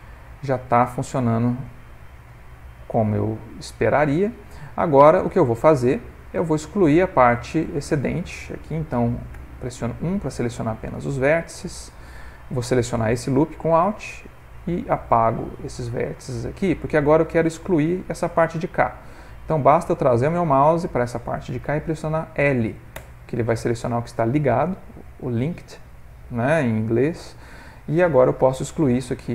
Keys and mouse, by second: 2.0 ctrl+middle click, 2.4 middle click, 4.1 ctrl+middle click, 4.5 middle click, 5.0 middle click, 6.7 click, 9.4 1, 11.3 alt+click, 13.8 x, 15.8 click, 22.9 l, 25.9 middle click, 26.8 middle click, 27.2 middle click, 28.5 x.